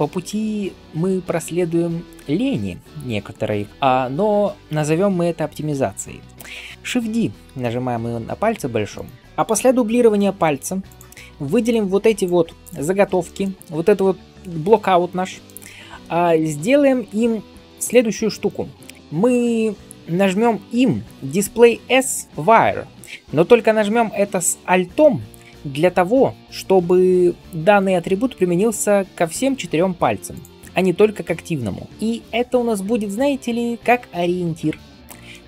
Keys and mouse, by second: 2.8-6.3 middle drag, 6.7-16.2 shift+middle drag, 7.0 shift+d, 16.5-24.7 middle drag, 30.5-35.4 drag.